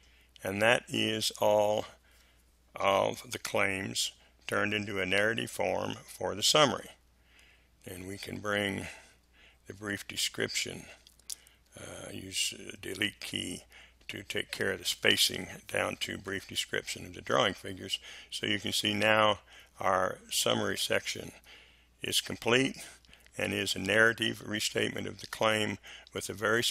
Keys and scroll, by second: 6.7 Delete, 8.8 Delete, 11.6 Delete.